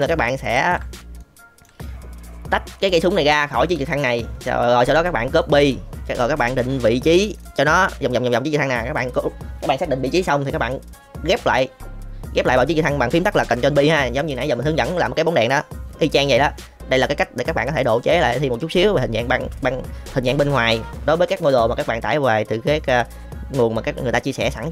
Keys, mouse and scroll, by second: 0.5 shift+middle drag, 1.2 middle click, 5.4 middle click, 6.2 middle click, 7.4 middle click, 8.7 middle click, 12.3 middle click, 14.7 middle drag, 16.2 middle click, 17.1 shift+middle drag, 17.8-18.7 middle drag.